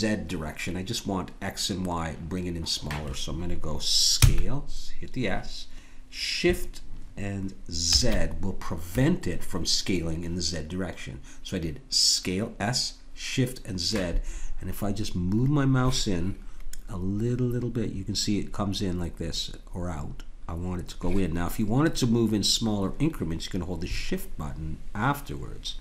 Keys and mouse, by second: 4.2 s.